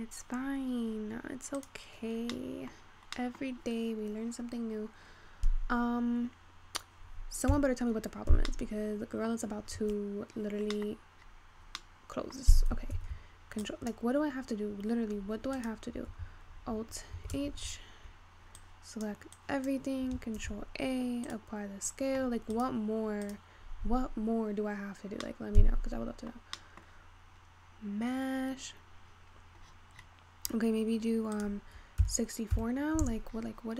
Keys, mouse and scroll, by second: 1.6-2.3 drag, 2.3-3.1 scroll up 3, 2.3 middle click, 3.1-4.4 scroll down 3, 3.2 middle click, 4.7-5.6 scroll down 4, 5.6-7.6 scroll up 3, 7.6 h, 8.2-8.7 scroll up 6, 8.7-9.8 middle drag, 9.8-10.4 scroll down 8, 10.8 middle click, 11.7-12.3 scroll down 6, 12.3 middle click, 12.9-13.3 ctrl+scroll up 1, 13.3 ctrl+s, 14.3 click, 15.7 click, 17.5 alt+h, 19.0 click, 20.7 ctrl+a, 23.2 click, 23.5 click, 24.9-26.1 scroll up 4, 26.1 middle click, 26.5-27.2 scroll up 1, 27.2 middle click, 28.1-29.3 scroll down 4, 29.3-29.8 scroll down 16, 29.8-30.4 scroll up 9, 30.4-31.4 scroll up 13, 31.4-33.7 drag.